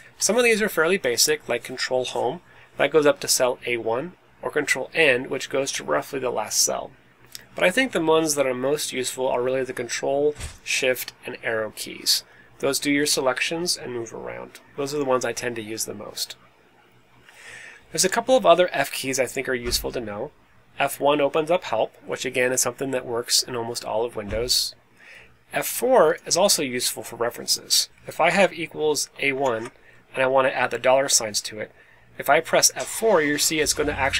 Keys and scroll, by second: 28.2-29.9 typing.